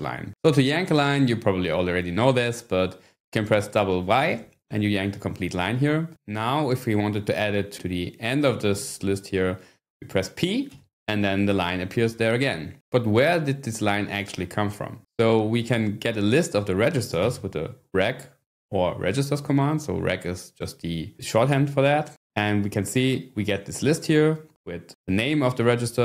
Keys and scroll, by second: 4.2 y, 8.7 shift+g, 10.7 p, 16.3-17.7 typing, 22.1 Return.